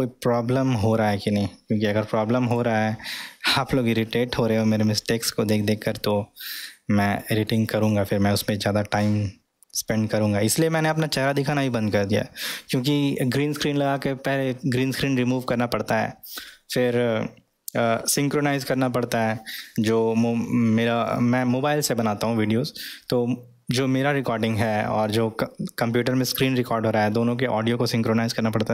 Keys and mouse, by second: 0.7 middle click, 3.7-7.6 middle drag, 8.5 middle click, 10.3-10.7 middle drag.